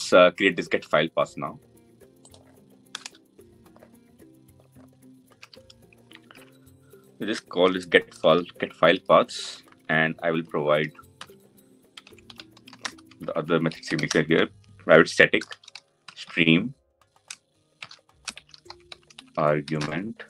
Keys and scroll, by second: 5.1 ctrl+c, 6.0 ctrl+v.